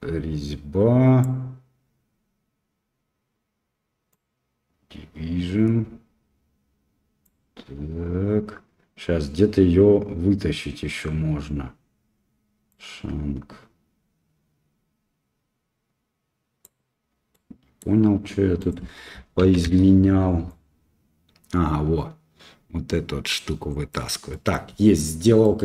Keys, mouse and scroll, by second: 4.1-7.3 drag, 12.7-16.7 drag, 17.3 middle click, 18.7-19.8 drag, 20.6-23.8 drag, 24.3 middle click, 25.4 middle click.